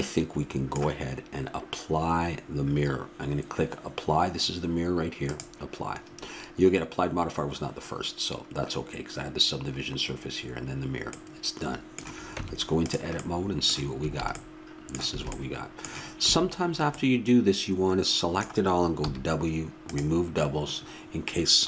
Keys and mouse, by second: 5.2-7.0 drag, 11.1-12.3 middle drag, 12.3 Tab, 14.0 a, 16.2 a, 19.1 w.